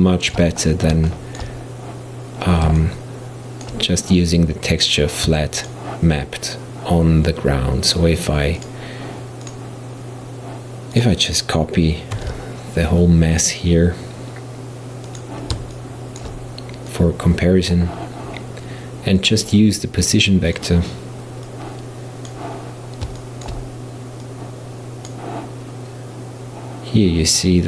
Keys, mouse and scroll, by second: 0.7-1.1 scroll down 7, 1.1-4.8 shift+middle drag, 4.8 click, 5.6 shift+click, 7.9 shift+drag, 8.6-9.5 shift+drag, 11.0 shift+click, 12.2 shift+d, 15.8-16.9 shift+middle drag, 16.9 click, 19.2 click, 21.5 click, 23.2-24.3 shift+middle drag, 24.3 click.